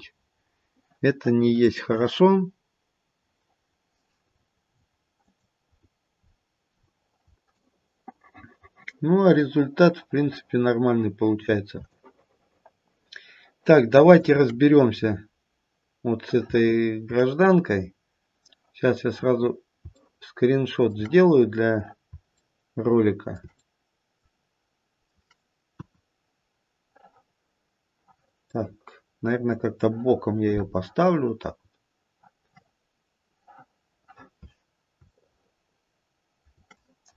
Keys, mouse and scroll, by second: 5.7-6.3 scroll down 3, 6.1-7.1 scroll up 10, 7.5 shift+click, 11.8 shift+click, 14.5-16.3 scroll down 5, 16.3-17.0 scroll down 2, 17.3-19.1 scroll down 2, 19.4-19.7 scroll up 1, 19.9 shift+middle click, 22.3 shift+middle click, 22.6 shift+middle click, 22.9 shift+middle click, 23.4 middle click, 24.7-25.5 scroll up 1, 25.6 KP_1, 28.4 middle click, 28.6 middle click, 32.8-34.6 scroll down 1, 34.6 scroll down 1, 35.0 shift+middle click.